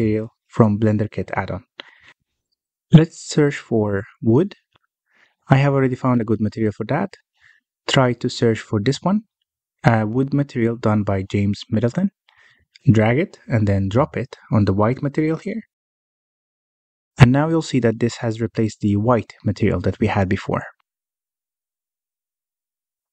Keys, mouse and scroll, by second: 1.9 o, 21.7-22.1 scroll up 1, 22.1 shift+middle click, 22.4-23.0 scroll up 1, 23.0 click.